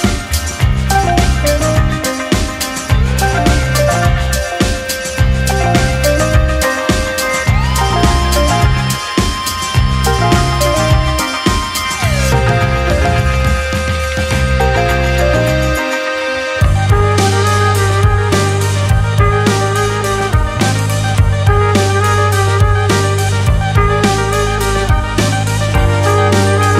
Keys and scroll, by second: 2.1 Delete, 3.4 ctrl+c, 6.2 ctrl+v, 9.3 ctrl+[, 9.5 space, 10.2 space, 11.6 ctrl+h, 11.7 space, 13.2 space, 14.2 space, 15.1 space, 16.6 space, 17.6 space, 17.7 ctrl+c, 20.7 ctrl+v, 23.1 ctrl+shift+v, 26.1 ctrl+[, 26.5 space.